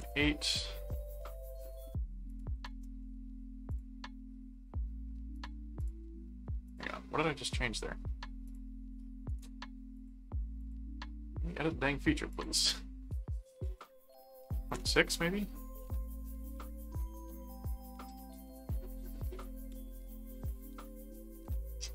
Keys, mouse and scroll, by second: 2.3 click, 3.7 click, 5.3 click, 6.7 click, 7.2 middle click, 8.4 click, 9.3 right click, 9.9 click, 10.6 click, 12.3 click, 13.6 click, 16.9 click, 17.8-18.9 middle drag, 19.4-21.7 middle drag.